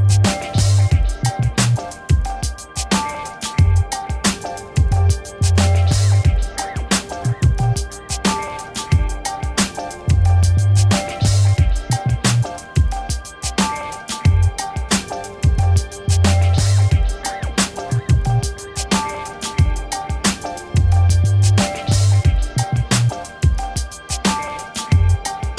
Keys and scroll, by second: 1.9 7, 2.3 0, 5.6 6, 6.5 Return, 23.2-24.4 typing.